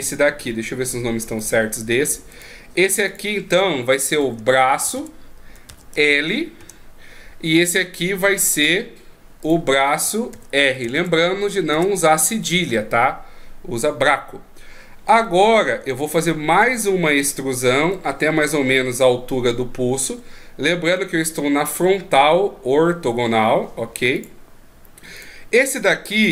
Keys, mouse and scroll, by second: 1.4 click, 2.3 right click, 3.1 click, 8.6 right click, 9.4 click, 15.4 shift+scroll down 3, 16.5 right click, 17.9 e, 25.2 right click, 26.2 click.